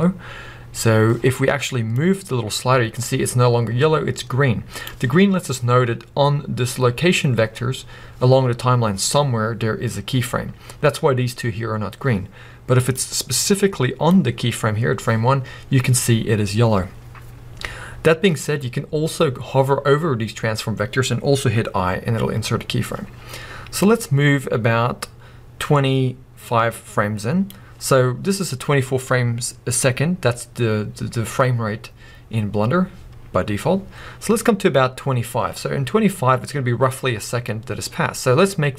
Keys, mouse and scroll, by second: 1.9-32.1 drag.